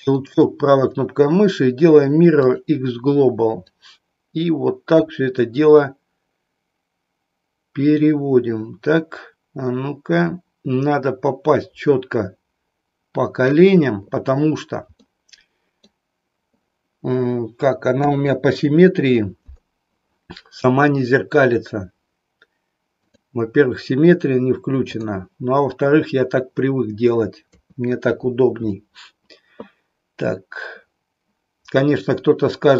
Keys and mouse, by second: 1.6-3.6 right drag, 3.6-13.6 drag, 15.1 middle click, 17.9 KP_1, 22.9 click, 24.9 click, 27.4 KP_3.